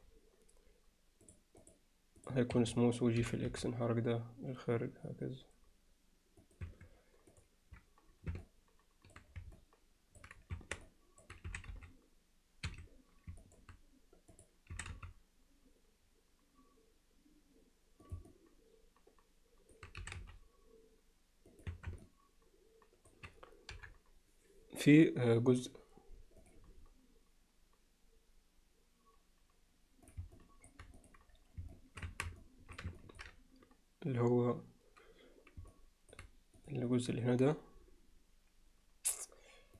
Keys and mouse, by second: 1.3 click, 1.7-2.6 drag, 2.6 Escape, 3.2 g, 6.7 Tab, 7.3 click, 8.4-9.2 middle drag, 9.6-10.2 alt+middle drag, 10.6 Tab, 10.9 alt+middle click, 11.5 s, 13.4 alt+middle click, 14.3 click, 14.7 s, 18.3-19.7 alt+middle drag, 20.0 s, 21.7 Tab, 22.0-23.1 alt+middle drag, 23.7 KP_7, 30.1 drag, 30.4-30.7 alt+middle drag, 31.0 click, 31.7 middle click, 32.1 Tab, 32.4 middle click, 33.0 ctrl+alt+middle click, 35.7 middle click, 36.7 click.